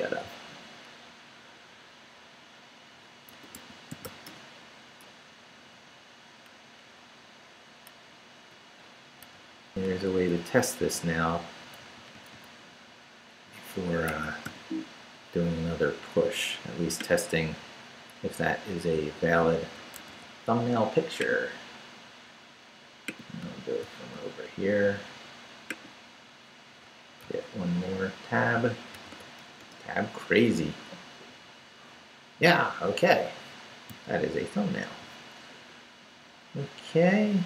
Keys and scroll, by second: 3.1-4.6 typing, 5.7 Right, 8.7 super+i, 9.2 super+v, 9.8 Right, 10.8 d, 11.6 Right, 14.1 Escape, 14.5 0, 19.9 super+c, 27.3 super+t, 28.9 super+v, 29.6 super+Return, 30.3 Return.